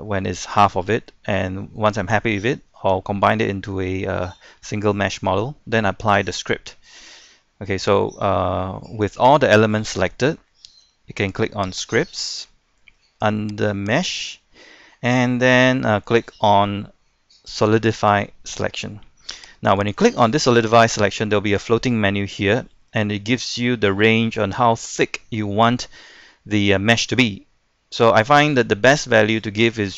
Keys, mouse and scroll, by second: 0.0 scroll down 1, 0.2 middle click, 1.4-1.9 scroll up 1, 1.9-2.8 scroll down 1, 2.8-4.7 middle drag, 11.8-12.8 drag.